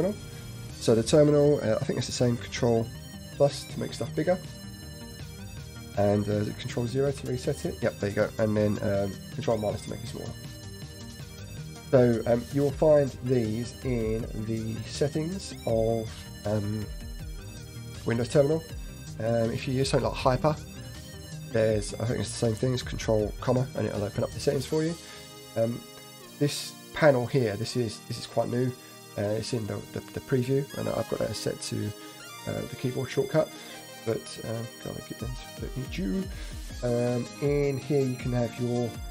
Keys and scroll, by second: 3.1 ctrl+=, 3.6 ctrl+=, 3.8 ctrl+=, 4.0 ctrl+=, 4.1 ctrl+=, 4.3 ctrl+=, 7.2 ctrl+0, 9.2 ctrl+-, 9.2 ctrl+-, 9.5 ctrl+-, 9.9 ctrl+=, 10.1 ctrl+=, 10.2 ctrl+=, 10.4 ctrl+=, 10.6 ctrl+=, 10.7 ctrl+=.